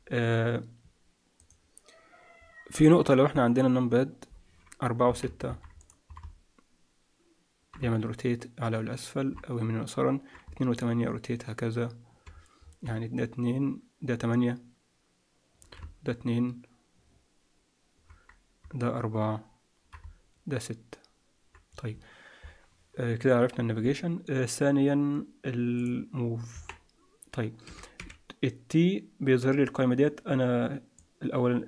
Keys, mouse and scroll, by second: 5.7 click, 6.1-21.4 typing, 12.3 scroll down 3, 12.8-13.3 scroll down 6, 25.7 click, 26.5 KP_1, 27.6 t, 27.9 t, 30.9 click.